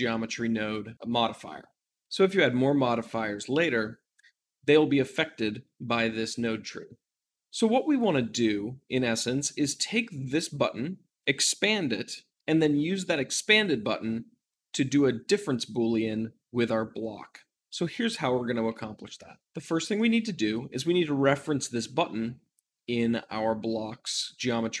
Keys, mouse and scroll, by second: 19.2-24.8 shift+middle drag.